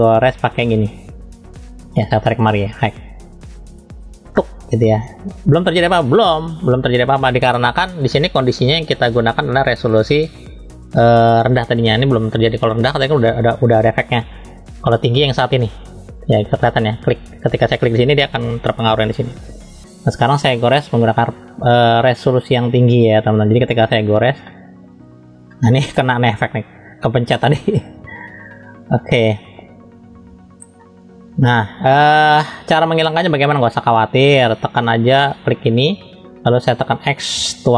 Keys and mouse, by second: 2.1-4.3 drag, 9.7-18.1 drag, 21.3 middle click, 22.7 click, 24.5 middle click, 25.5 middle click, 27.9 ctrl+z, 28.3 ctrl+z, 29.1 ctrl+z, 30.1 ctrl+z, 30.3 ctrl+z, 30.8 middle click, 31.4 shift+middle click, 31.8 middle click, 32.4 middle click, 33.2 middle click, 35.6 click, 37.3 x.